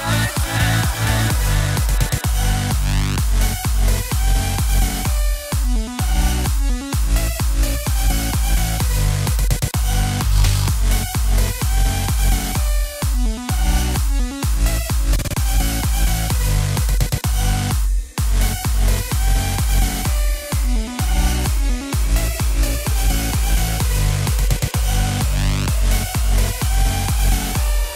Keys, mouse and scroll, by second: 1.6 click, 2.0 x, 2.5 click, 2.9 x, 3.6 click, 3.8 x, 4.4-5.7 middle drag, 5.7 click, 5.9 x, 6.9 KP_1, 9.2 shift+a, 9.9 click, 11.2 KP_3, 12.4-16.5 drag, 16.5 KP_0, 18.5 KP_0, 19.2 KP_0, 20.0-20.4 scroll up 2, 20.7 scroll down 1, 25.3 KP_0.